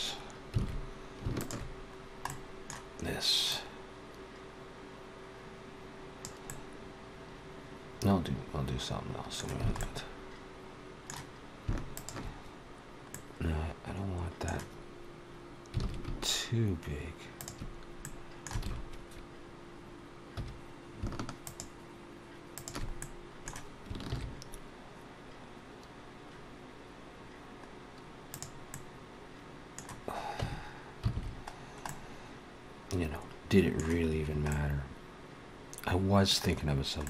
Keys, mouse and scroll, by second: 0.5 alt+a, 1.1 alt+shift+click, 1.8 scroll down 2, 2.1 middle click, 3.3 click, 6.3 middle click, 9.6 alt+a, 9.6 middle click, 11.8 alt+shift+click, 13.0 middle click, 15.6 alt+s, 17.8 middle click, 18.4 alt+a, 20.1 2, 21.3 alt+shift+click, 22.4 alt+shift+click, 22.8 middle click, 23.9 ctrl+b, 28.5 middle click, 30.2 Tab, 31.0 alt+a, 31.4 scroll down 1, 31.7 middle click, 33.9-34.3 scroll down 2, 34.3 middle click, 36.5-36.9 scroll down 2, 36.9 middle click.